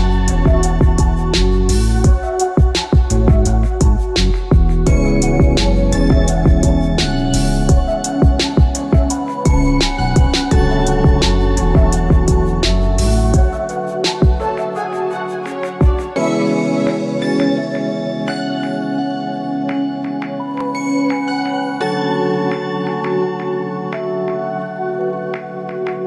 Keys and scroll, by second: 1.5 ctrl+alt+shift+e.